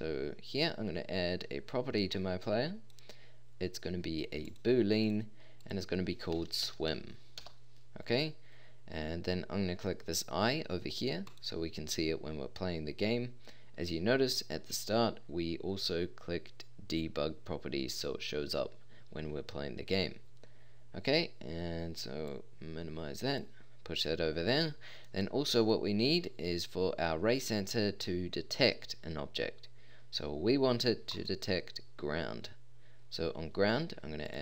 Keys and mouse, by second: 2.4 click, 2.6 click, 4.5-4.9 drag, 22.3 typing, 31.1-33.4 drag.